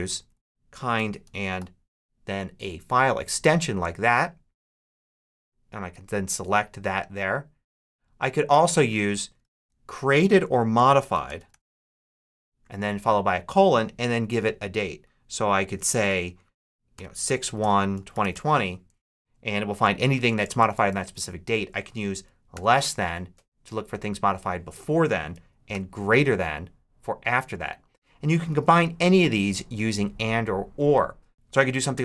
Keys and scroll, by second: 0.6-1.9 typing, 9.3 super+a, 9.4 super+BackSpace, 10.4-12.5 typing, 16.6-18.7 typing, 20.0 Left, 21.8 shift+Left, 22.4 shift+,, 25.1 BackSpace, 25.6 shift+., 28.4 super+a, 28.6 super+BackSpace, 29.5 BackSpace, 31.6-32.0 typing.